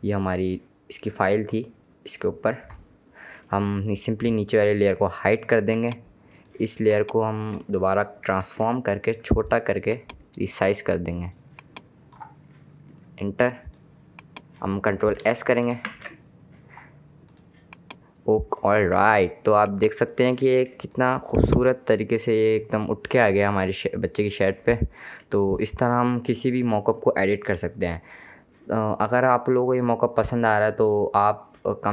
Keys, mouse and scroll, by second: 5.3 click, 8.4 ctrl+t, 9.5 alt+click, 11.3 click, 13.0 KP_Enter, 13.8 click, 16.0 s, 17.4 click, 19.2 space, 19.3 click, 19.7 space, 20.9 space, 21.1 click, 21.3 space.